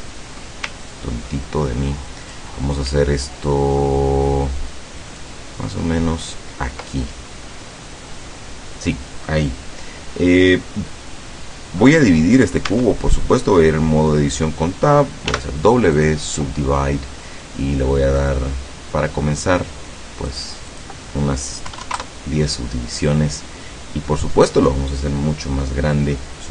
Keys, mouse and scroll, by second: 0.8-2.6 ctrl+drag, 5.3-6.6 ctrl+drag, 12.8 Tab, 15.3 w, 16.0 click, 18.3 click, 20.4 click, 20.7 click, 21.7 KP_1, 21.9 KP_0, 22.0 KP_Enter.